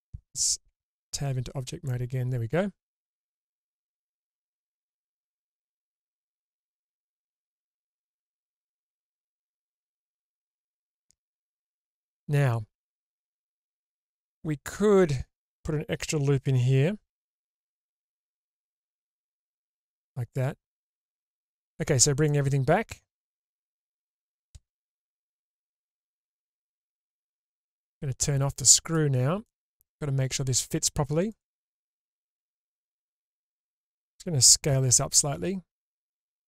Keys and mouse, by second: 0.7 Tab, 1.9-8.8 middle drag, 9.3 Tab, 11.2 click, 11.7 middle click, 11.9 click, 12.3 middle click, 12.3 click, 12.5 middle click, 17.2 ctrl+r, 20.0-21.0 drag, 21.7 /, 22.3-22.7 middle drag, 22.7-23.1 drag, 23.1-23.8 middle drag, 24.5 shift+space, 27.0 click, 28.8 click, 29.4-30.5 middle drag, 32.5 alt+z, 35.3 s.